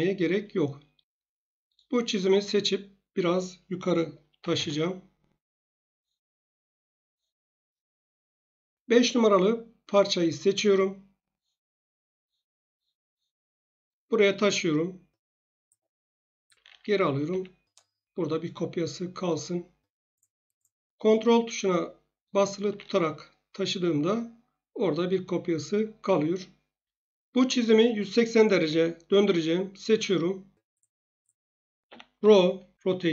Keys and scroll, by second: 4.4 m, 4.5 Return, 7.9 typing, 16.6 ctrl+z, 17.3 ctrl+z, 31.8-32.2 typing.